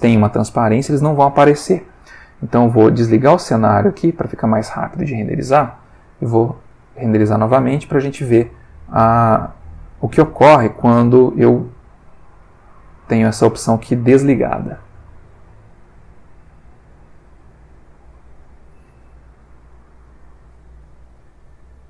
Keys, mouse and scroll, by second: 3.7 click, 5.6 F12.